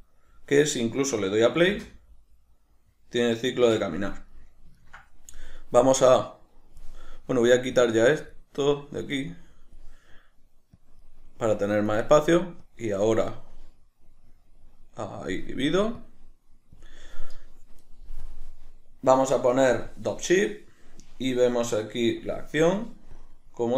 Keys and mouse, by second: 1.7 space, 3.7 Escape, 4.3 middle click, 6.1-23.7 drag.